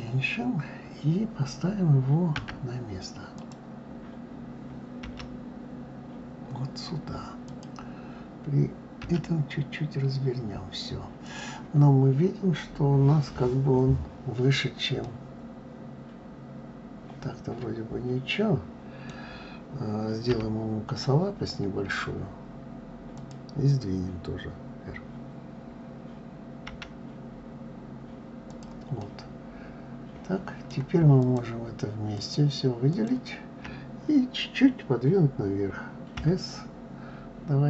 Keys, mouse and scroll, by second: 2.1 d, 3.1 click, 4.8 g, 14.8-17.8 middle drag, 28.8-31.0 middle drag, 31.0 shift+click, 31.9 shift+click, 32.7 shift+click, 35.9 KP_3.